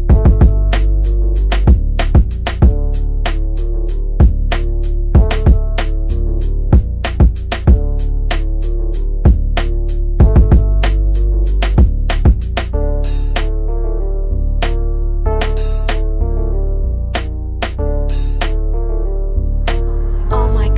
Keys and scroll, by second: 8.7 F4, 19.3-20.2 typing.